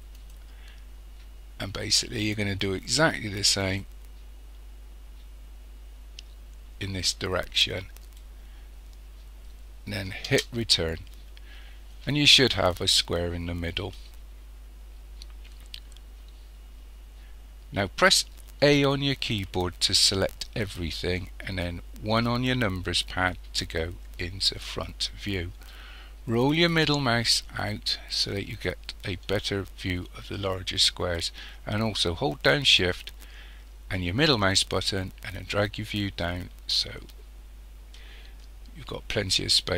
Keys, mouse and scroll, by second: 10.5 Return, 18.6 a, 22.1 KP_1, 26.7-27.3 scroll down 2, 34.0-35.5 middle drag, 35.7-39.7 middle drag.